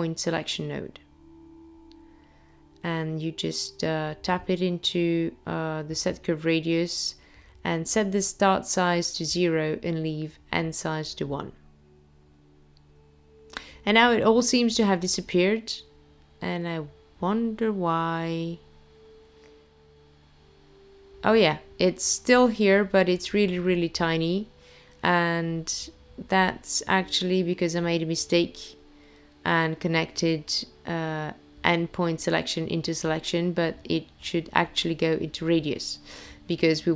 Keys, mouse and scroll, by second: 12.2 click, 14.4-16.6 scroll down 4, 16.8 scroll down 2, 17.6-18.7 scroll up 3, 18.7-20.8 scroll up 1, 20.8 click, 30.0 click, 31.3 click, 33.2-33.9 scroll up 2, 33.9-34.9 scroll down 2, 34.9 middle click.